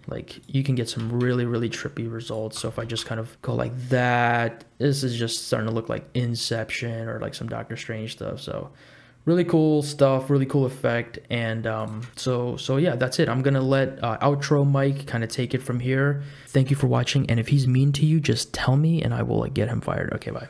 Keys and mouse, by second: 1.0 r, 2.6 r, 12.1 space, 13.7 space.